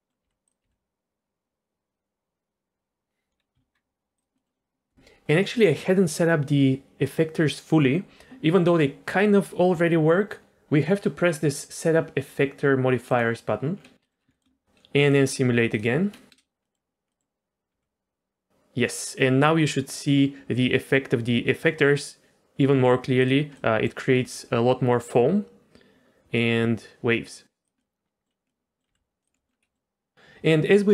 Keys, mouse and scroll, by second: 0.2 g, 0.6 g, 3.4-4.2 scroll down 2, 3.5 z, 4.2 drag, 4.3 middle click, 13.1 click, 13.7-14.3 scroll up 2, 14.0 middle click, 14.3 shift+middle click, 15.1 click, 15.7 click, 16.1 middle click, 16.3 space, 16.6 middle click, 17.1 middle click, 17.8 g, 23.6 middle click, 24.2 g, 27.8 middle click, 28.5 middle click, 28.9 g, 29.3 middle click, 29.5 scroll down 1, 29.6 middle click.